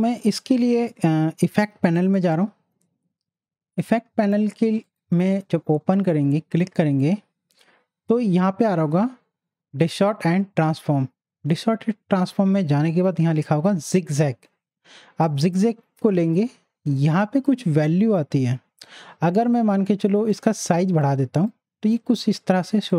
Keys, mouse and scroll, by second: 2.2 click, 4.8 click, 15.2 click, 17.0-19.8 drag, 20.3 click, 20.3-22.9 drag.